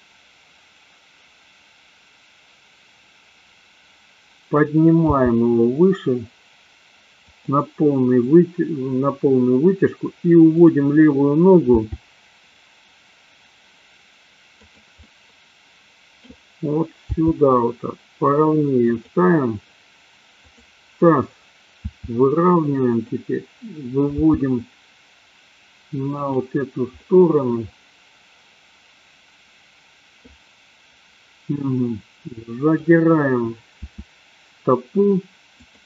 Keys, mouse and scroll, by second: 5.2 g, 7.4 click, 11.6 g, 14.7 click, 15.0-16.2 middle drag, 17.2 g, 20.5 click, 21.9 r, 24.1 g, 26.4 click, 26.9-30.2 middle drag, 32.7 click, 33.7 r, 35.7 click.